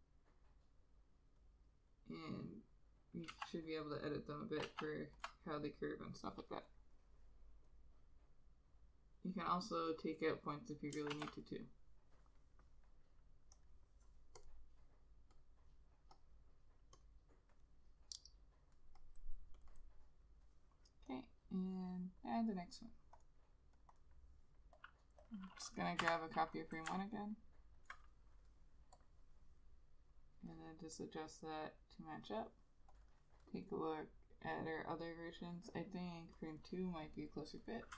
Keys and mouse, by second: 1.5 ctrl+click, 2.7 ctrl+click, 3.4 ctrl+z, 4.0 ctrl+click, 4.8 ctrl+z, 5.3 ctrl+click, 11.3 ctrl+z, 16.4 double click, 19.8 double click, 24.1 double click, 26.1 F6, 27.0 F6, 27.3 alt+click, 33.2 double click.